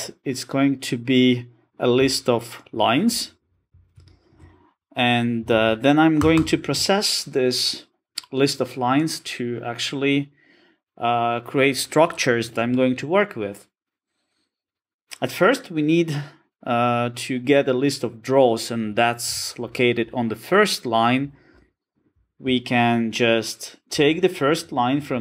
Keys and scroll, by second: 5.6 alt+super+[.